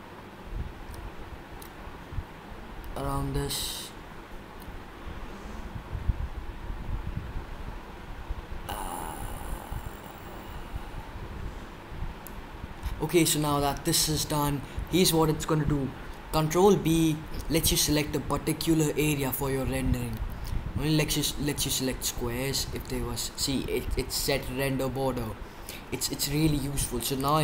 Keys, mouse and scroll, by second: 27.1 click.